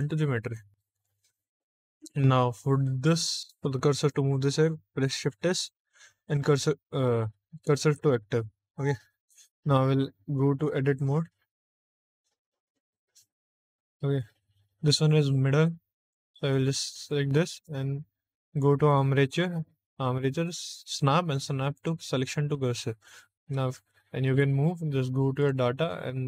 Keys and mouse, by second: 0.8 click, 1.6 middle click, 5.0 shift+s, 8.6 shift+middle click, 10.4 Tab, 11.9 Tab, 12.5 click, 12.9 Tab, 15.9 click, 16.9 shift+middle click, 18.4-21.8 drag, 23.3 Tab, 23.8 shift+middle click, 25.3 click.